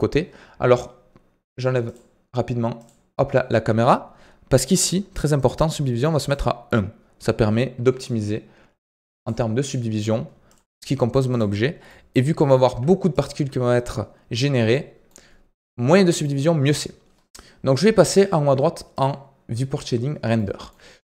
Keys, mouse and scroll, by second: 4.6-11.8 drag, 11.8-12.3 middle drag, 12.3 g, 14.7-17.7 middle drag, 19.4 click, 20.3-21.0 shift+middle drag.